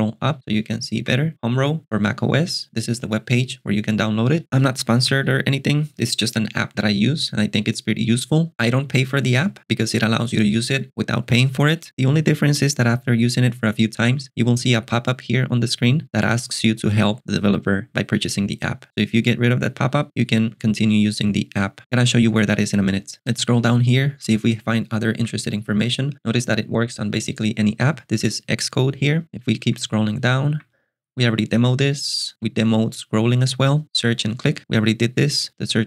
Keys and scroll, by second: 0.4 k, 1.0 j, 1.3 k, 23.6 j, 25.2 j, 25.7 k, 29.2 j, 33.8 j.